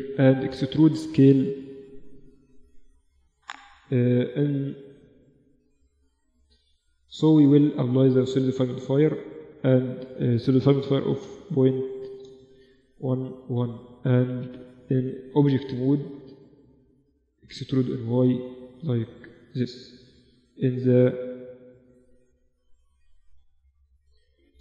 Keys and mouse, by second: 0.4 e, 4.2 KP_3, 5.2 KP_4, 7.0 middle click, 7.8 middle click, 11.4 1, 14.0 Escape, 14.2 Tab, 15.2 Tab, 16.6 e, 19.6 KP_7, 20.3 z, 20.7-22.8 middle drag, 23.0 ctrl+z.